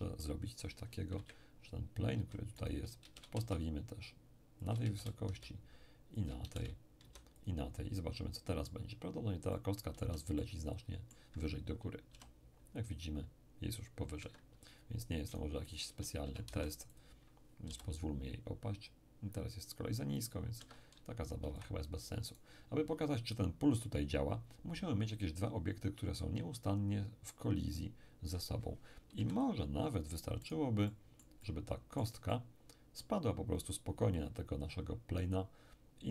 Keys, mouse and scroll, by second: 1.1 KP_1, 2.1 z, 2.6 shift+right click, 3.0 shift+d, 3.3 shift+z, 4.6 shift+click, 4.8 shift+d, 5.3 z, 6.2 shift+click, 6.6 d, 7.0 z, 7.4-9.2 shift+drag, 8.3 shift+middle click, 9.2-9.5 scroll down 2, 9.5-12.1 middle drag, 10.0 z, 12.1 p, 14.2 Escape, 15.3 shift+right click, 16.0-17.7 typing, 16.9 shift+click, 20.6 Escape, 21.5 x, 21.6-23.3 drag, 22.3 right click, 29.2 KP_1, 30.5-31.5 right drag, 30.9-33.9 middle drag.